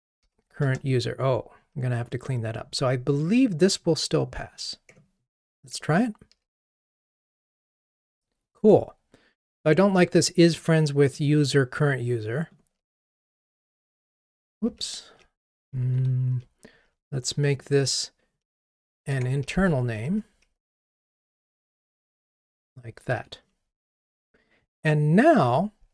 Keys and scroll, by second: 6.3 ctrl+r, 13.6 shift+F6, 15.9 super+F6, 18.7 super+x, 20.4 super+v, 23.1 super+v, 23.2 ctrl+r.